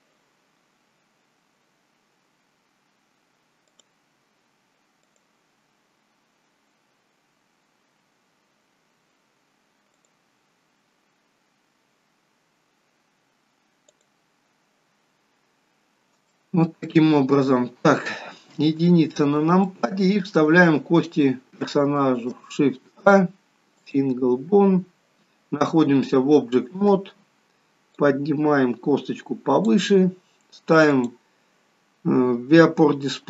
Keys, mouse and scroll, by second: 1.1-2.5 scroll down 2, 5.9 click, 6.0 click, 7.8 scroll up 2, 8.2 scroll down 1, 8.3-8.7 scroll down 1, 10.2 click, 14.1 click, 15.8-16.3 scroll down 2, 16.5 shift+middle click, 17.7-18.7 scroll down 3, 18.7 KP_1, 19.8 shift+middle click, 22.2 shift+a, 28.1 click, 31.1 click.